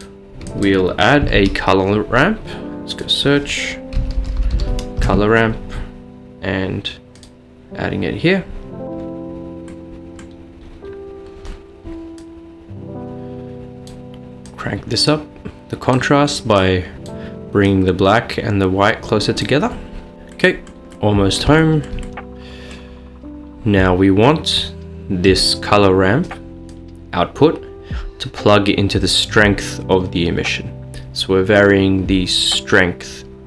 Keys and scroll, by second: 1.4 a, 4.0-4.9 typing, 5.0 Return.